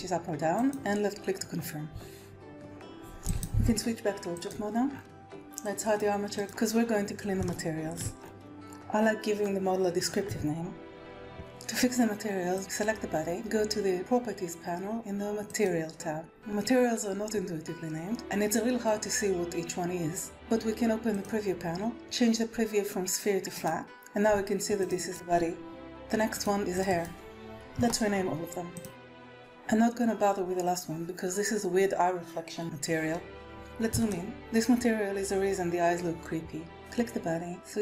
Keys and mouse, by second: 3.3-4.5 drag, 6.3 click, 7.4-7.9 shift+drag, 8.4-11.2 drag, 10.9 BackSpace, 11.2 BackSpace, 15.5 click, 21.1 click, 23.6-24.9 drag, 25.1 click, 25.5 space, 26.7 click, 27.8 click, 28.1 c, 28.1 s, 28.3 click, 28.7 click, 29.0 click, 33.6 middle click, 33.8 shift+middle click, 36.7-37.8 drag.